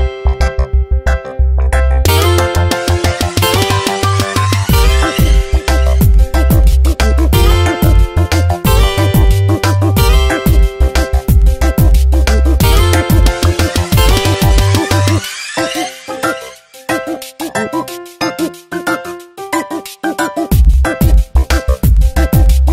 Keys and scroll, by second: 1.3 h, 1.7 space, 1.8 s, 2.0 n, 2.7 Return, 4.3 space, 6.6 space, 7.0 h, 7.5 space, 7.7 s, 8.7 Return, 9.3 ctrl+BackSpace, 10.2 Tab, 15.1 Return, 16.2 space, 16.6 v, 17.7 Tab, 19.3 ctrl+t, 21.3 Return.